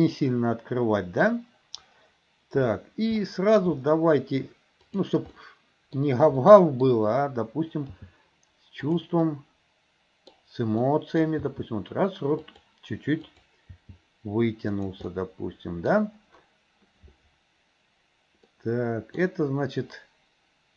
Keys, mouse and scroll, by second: 3.2-3.6 shift+middle drag, 4.9 click, 5.4-6.0 middle drag, 6.4-6.9 middle drag, 8.1 g, 9.2-10.4 middle drag, 10.9 middle click, 11.5 g, 13.2 click, 13.7 g, 15.1 middle click, 18.6-19.2 middle drag.